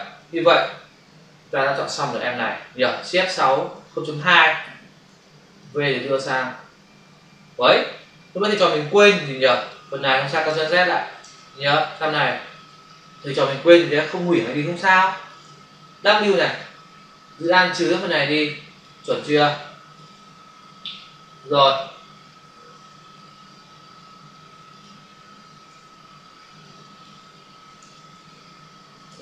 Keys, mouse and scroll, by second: 3.5 shift+F6, 4.1 Return, 5.0 v, 5.5 click, 9.0 click, 10.4 ctrl+alt+z, 11.1 ctrl+alt+z, 11.9 click, 12.1 click, 12.8 ctrl+click, 14.8 ctrl+click, 16.4 w, 17.4 alt+click, 19.1 space, 19.3 ctrl+click, 23.9 ctrl+-, 24.6 shift+click, 26.5 alt+click, 27.8 ctrl+alt+z, 29.0 ctrl+alt+z.